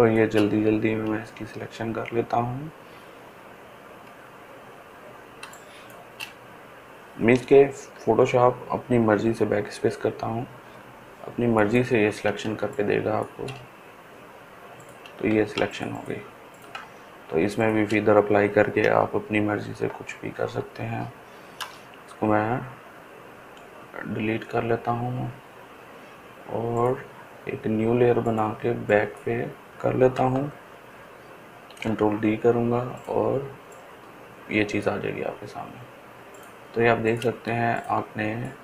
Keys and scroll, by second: 7.7 BackSpace, 9.0 BackSpace, 9.8 BackSpace, 19.3 shift+F8, 19.8 shift+F7, 20.1 shift+F6, 21.5 Return, 24.1 Delete, 31.6 ctrl+d.